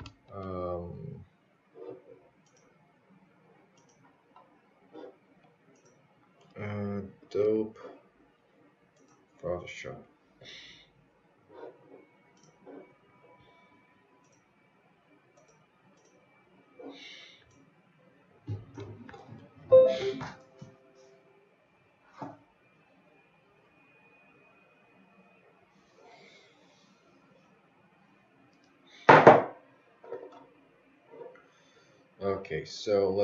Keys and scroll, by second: 1.2 space, 12.5 space, 28.9 space.